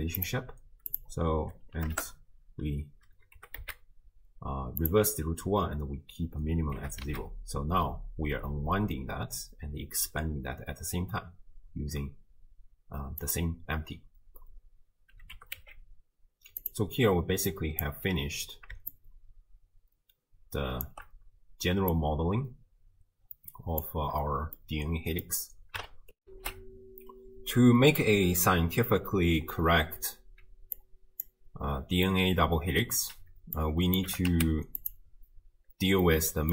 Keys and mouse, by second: 0.2 click, 0.9-2.0 drag, 3.4 g, 6.8 g, 15.3 g, 17.5 click, 18.9-20.9 shift+drag, 21.9-23.9 drag, 24.7 middle click, 26.2 ctrl+alt+shift+w, 26.5 ctrl+alt+shift+q, 30.8-31.3 drag, 32.2 middle click, 33.6-34.0 drag, 34.1 g, 36.2 middle click.